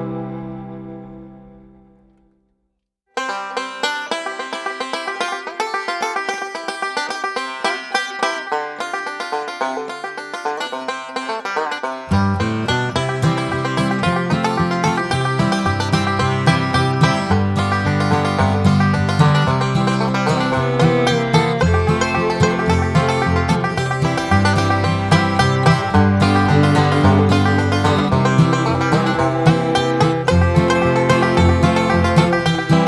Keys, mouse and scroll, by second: 0.3 click, 1.5 click, 2.8 click, 3.3 Escape, 3.7 click, 5.1 click, 6.6 click, 9.0 click, 10.5 click, 10.9 Escape, 11.3 click, 11.7-12.9 drag, 13.3 scroll up 2, 13.8 scroll down 2, 14.5 click, 15.9 click, 17.7 click, 19.4 right click, 21.0 click, 22.1-23.4 drag, 24.5 click, 24.9 click, 25.5 scroll up 1, 27.9 click, 30.1 click, 32.2 click.